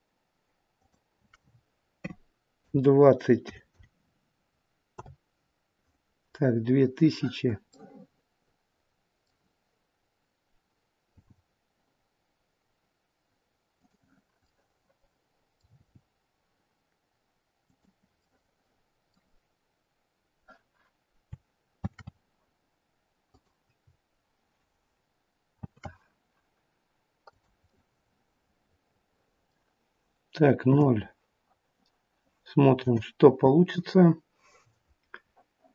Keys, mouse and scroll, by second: 0.7 click, 3.5 KP_0, 7.7 middle click, 11.1 g, 14.4 middle click, 15.6 g, 18.1 middle click, 21.9 shift+d, 25.6 shift+d, 27.5 middle click, 30.5 KP_0, 32.8 KP_0, 33.9-34.5 scroll up 4.